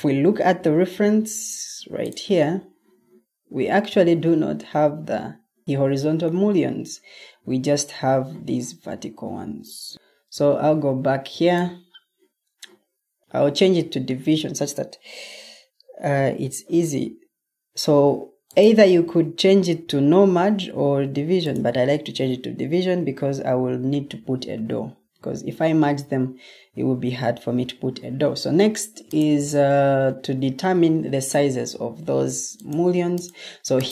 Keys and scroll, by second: 10.3 super+Tab, 12.5 super+Tab.